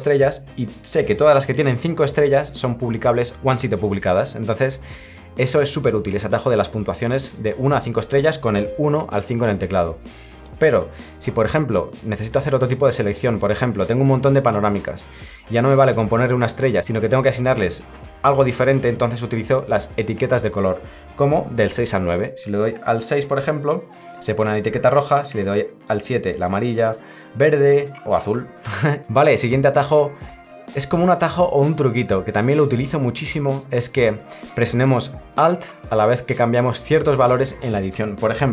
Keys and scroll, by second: 25.0 7, 26.5 8, 27.5 9.